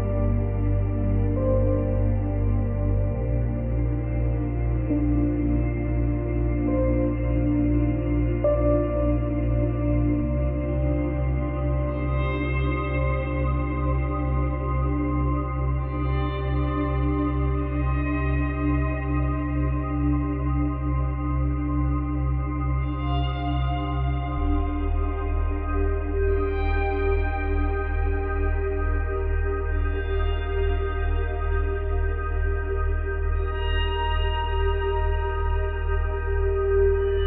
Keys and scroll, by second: 31.9 ctrl+z.